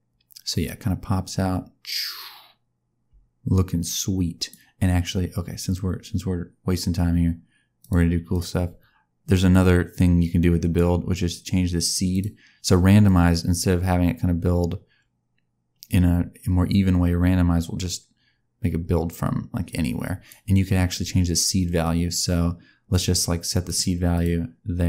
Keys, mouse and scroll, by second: 7.7 click, 8.2 click, 9.5 click, 12.0 click, 13.0 click, 21.8 click, 23.6 right click.